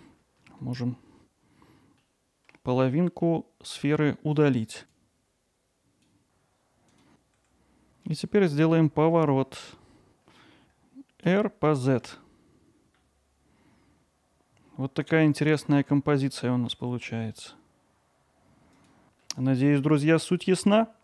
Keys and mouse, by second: 0.5 ctrl+alt+middle click, 2.0 middle click, 3.1 middle click, 3.8 click, 4.8 KP_7, 5.0-6.0 drag, 7.0 x, 15.9 middle click, 18.1 middle click, 18.3 alt+middle drag.